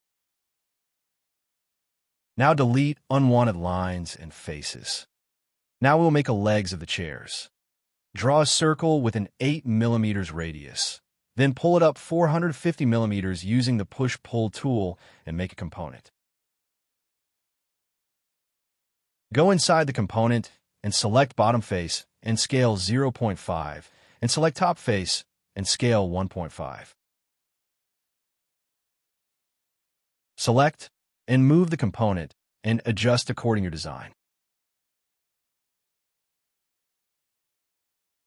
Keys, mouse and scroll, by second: 0.9 scroll down 1, 1.3 middle click, 2.3 scroll up 1, 3.2 scroll down 1, 3.9 middle click, 4.2 Delete, 4.4 scroll down 1, 4.7 scroll up 1, 5.2 middle click, 5.5 c, 5.6 scroll up 1, 6.8-7.7 typing, 8.0 scroll up 1, 8.8 middle click, 11.6 scroll down 1, 11.7 space, 13.2 right click, 15.9 middle click, 16.5-16.9 scroll up 2, 16.8 m, 17.7-18.2 scroll down 1, 18.2 space, 18.3-18.8 scroll down 1, 18.8 double click, 19.9 scroll down 1, 20.2 s, 20.6 scroll up 1, 23.8 5, 23.9 Return, 24.2 scroll down 1, 24.4 space, 25.2 s, 26.6-27.6 typing, 28.0 shift+middle click, 28.3-28.9 scroll down 1, 28.9-29.3 scroll up 1, 29.7 middle click, 29.9 space, 29.9 Escape, 30.6 scroll down 1, 32.6-34.8 typing, 33.8 scroll down 1, 34.1 middle click, 34.6 scroll up 1, 36.7 0, 36.9 Return, 37.1 space, 37.3 middle click.